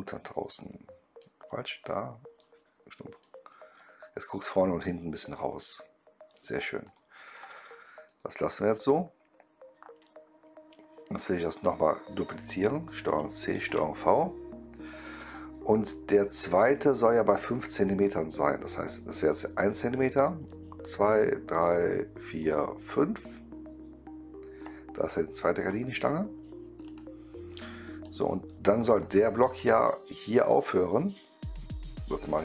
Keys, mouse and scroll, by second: 0.4-1.1 drag, 2.3-3.1 drag, 3.7-6.2 right drag, 5.4 middle click, 6.7 click, 7.9 click, 8.9-9.4 scroll down 1, 9.9 right click, 11.5 click, 13.0 ctrl+c, 13.4 ctrl+v, 16.6-24.6 drag, 25.6 click, 26.8 right click, 28.0-28.4 right drag, 28.1 middle click, 28.8 click.